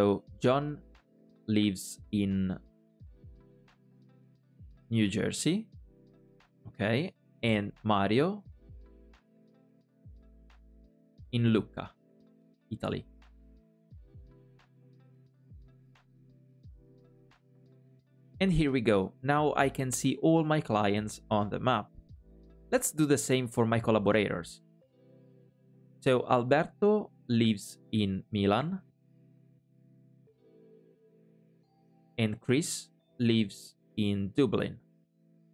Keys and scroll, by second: 25.7 super+p.